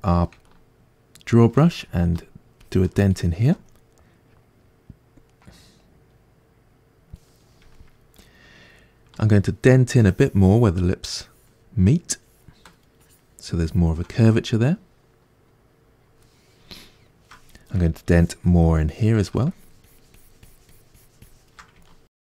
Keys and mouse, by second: 2.1-5.3 ctrl+drag, 5.3-9.9 middle drag, 9.9-14.4 ctrl+drag, 14.4-18.0 middle drag, 18.0-21.9 ctrl+drag, 21.9-22.3 ctrl+middle drag.